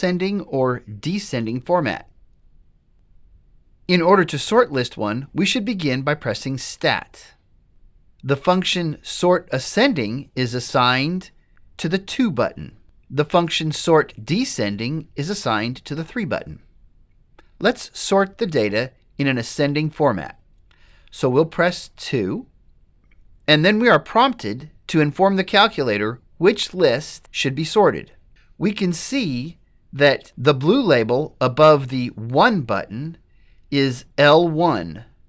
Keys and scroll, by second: 2.9 1, 22.2 2.